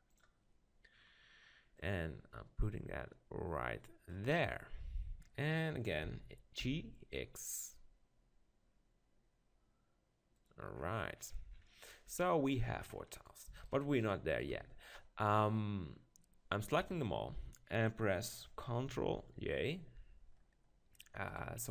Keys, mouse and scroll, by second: 0.7-1.8 middle drag, 1.8-3.8 drag, 4.3-9.2 middle drag, 6.1 g, 10.4-12.2 drag, 12.2-16.1 middle drag, 13.2 click, 16.9 KP_7, 19.0 ctrl+j, 21.3-21.7 right drag.